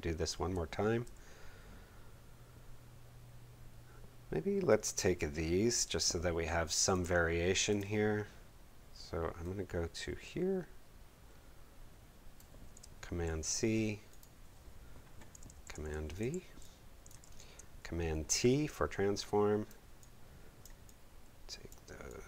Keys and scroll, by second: 0.5 space, 13.2 super+c, 15.5 super+v, 16.8 v, 17.2 super+t.